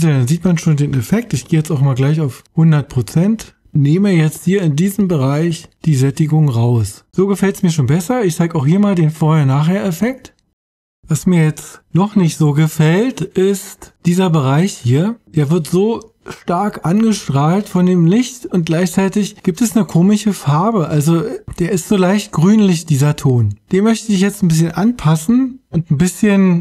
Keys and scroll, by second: 0.3 o.